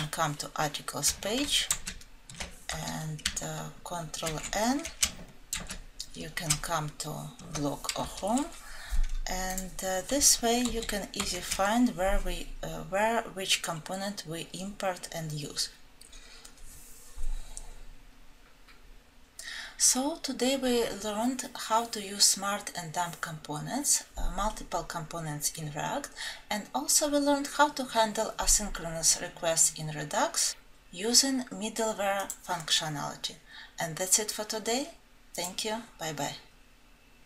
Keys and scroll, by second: 1.7 ctrl+alt+F7, 5.4 alt+Home, 5.5 ctrl+alt+F7, 10.7 alt+Right.